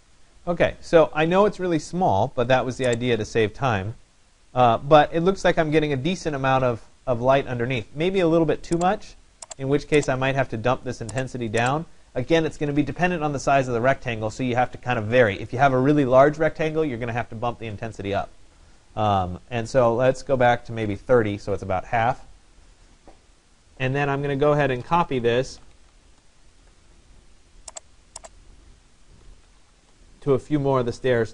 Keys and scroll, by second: 20.1 3, 20.6 0, 23.6 Tab, 25.3-26.3 typing.